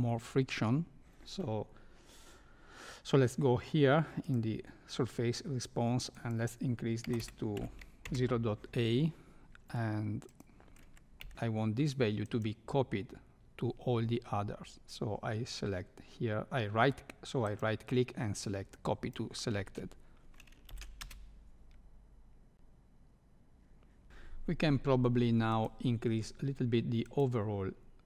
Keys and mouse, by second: 6.2-8.5 drag, 10.3 click, 11.2 c, 12.2-16.7 right drag, 17.4-19.1 right drag, 20.7 shift+Left, 21.0 space, 24.2 shift+Left, 24.2 space, 25.5 click, 27.0 click.